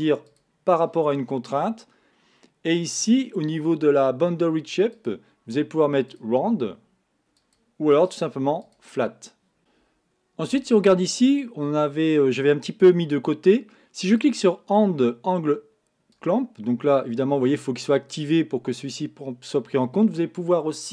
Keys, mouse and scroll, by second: 5.0-9.6 drag, 9.6-12.0 middle drag, 14.3-19.2 drag.